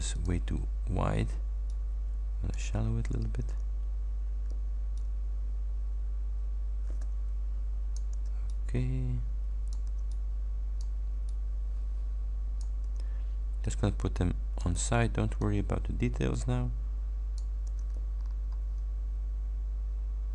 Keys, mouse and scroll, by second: 0.2 click, 1.8 shift+click, 5.0-8.2 drag, 8.2 ctrl+d, 8.6-10.0 ctrl+drag, 9.9 ctrl+d, 10.2 ctrl+click, 11.4-12.9 ctrl+drag, 12.9 ctrl+d, 13.7 ctrl+click, 14.9 ctrl+d, 15.4-17.6 ctrl+drag, 17.7 ctrl+d, 18.2-18.6 ctrl+scroll down 3.